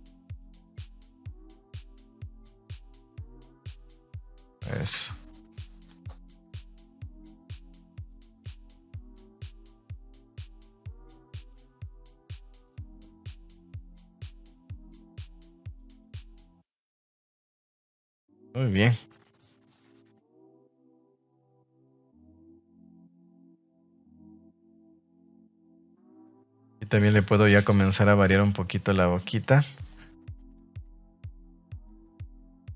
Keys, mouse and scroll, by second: 0.1 g, 0.7 click, 0.9 r, 2.1 click, 2.4 g, 3.5 click, 4.3 click, 4.8 a, 5.2-5.7 middle drag, 5.9 middle drag, 9.0 middle click, 9.5 shift+middle click, 10.3 middle click, 11.0 right click, 11.3 g, 12.1 r, 12.8 click, 13.0 g, 13.8 drag, 14.9 click, 15.1 g, 15.4 click, 16.1 r, 16.8 Tab, 17.0 Tab, 17.6 middle drag, 17.8 a, 18.0 a, 18.3-18.6 middle drag, 18.7 shift+middle click, 18.9 middle click, 19.6 shift+middle click, 20.0-21.1 middle drag, 21.6 middle click, 22.5 right click, 22.7 Tab, 23.0 middle click, 23.4 middle click, 24.1 middle click, 25.5 ctrl+Tab, 26.5 f, 27.0 g, 27.2 f, 30.3 click, 31.0 click.